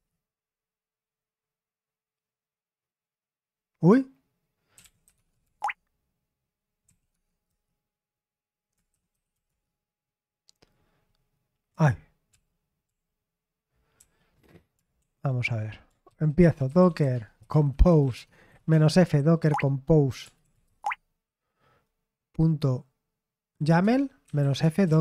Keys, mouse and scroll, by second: 0.0-0.3 typing, 4.5-7.4 typing, 8.6-9.8 typing, 11.4-12.2 typing, 12.2 ctrl+p, 12.8 ctrl+p, 15.3-21.2 typing, 23.7 Tab, 23.9-25.0 typing.